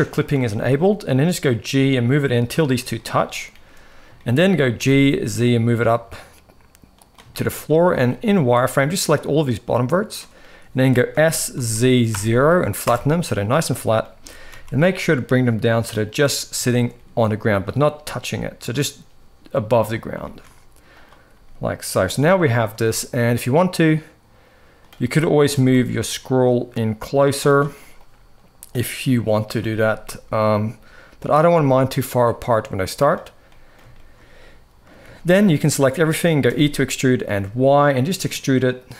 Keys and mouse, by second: 0.3 shift+middle click, 1.4 g, 4.0 shift+middle click, 7.1 shift+middle click, 8.3-9.9 drag, 8.3 z, 10.8 s, 13.5 shift+middle click, 13.9 g, 16.4 shift+middle click, 17.6 g, 20.0 shift+middle click, 20.7 click, 21.0 g, 22.2 shift+middle click, 23.1-24.5 drag, 25.2 g, 27.8 click, 29.3 g, 31.3 middle click, 32.0 middle click, 33.3 middle click, 33.8 middle click, 34.8 a, 35.3 shift+middle click, 36.2 e.